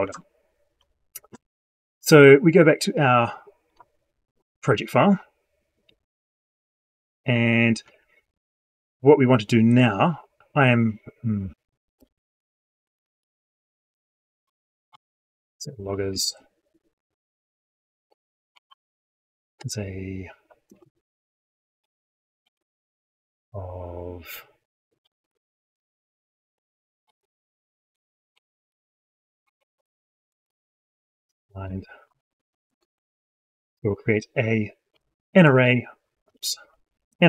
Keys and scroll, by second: 27.8 ctrl+Left.